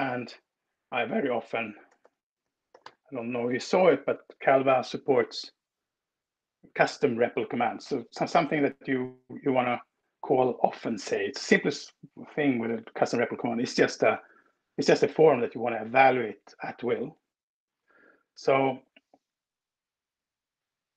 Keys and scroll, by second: 0.9 ctrl+w, 1.3-3.1 typing, 3.8 Escape, 19.7 shift+super+p.